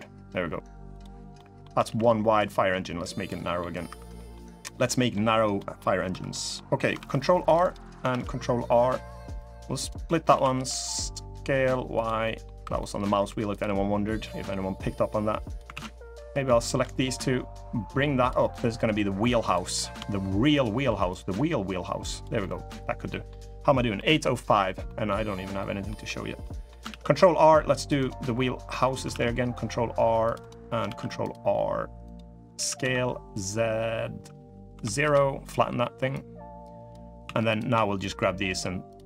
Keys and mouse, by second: 1.1 middle click, 1.5 a, 2.1 click, 3.2 middle click, 3.6 3, 3.9 middle click, 4.4 middle click, 4.6 middle click, 5.3 middle click, 5.8 3, 6.0 click, 6.7 ctrl+r, 7.9 ctrl+r, 10.0 s, 12.0 click, 12.4 3, 12.5 click, 12.7 middle click, 13.0 2, 14.0-15.3 drag, 15.5 ctrl+z, 15.9 2, 16.3 shift+click, 16.9-18.0 drag, 18.2 middle click, 19.0 3, 20.9-21.9 drag, 22.1 middle click, 22.8 middle click, 23.7 middle click, 24.6 middle click, 25.3 middle click, 26.2 middle click, 26.6 ctrl+r, 30.5 ctrl+r, 30.7 ctrl+r, 32.3 s, 35.9 click, 37.0 2, 37.7 shift+click.